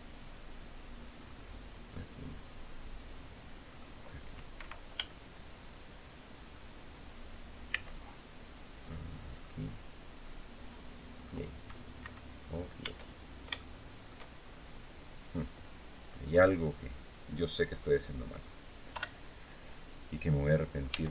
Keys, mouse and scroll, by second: 0.9 click, 3.4 click, 4.3 Escape, 4.8-6.4 shift+drag, 7.4 c, 9.0 click, 10.9 click, 11.7 Escape, 12.1-12.5 scroll down 1, 13.0 shift+scroll down 1, 13.3 shift+click, 13.3 shift+middle click, 14.1 shift+scroll up 2, 14.5-14.8 scroll down 2, 15.8-16.1 scroll up 1, 16.3 scroll down 2, 18.6 KP_7, 20.6 s.